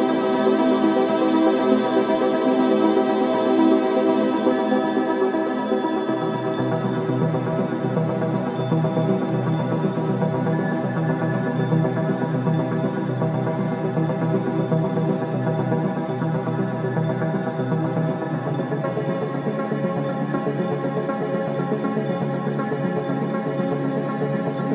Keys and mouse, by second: 1.7 click, 2.9 g, 13.5 click, 15.7 g, 18.0 click, 19.3 g, 21.4 click, 22.7 s.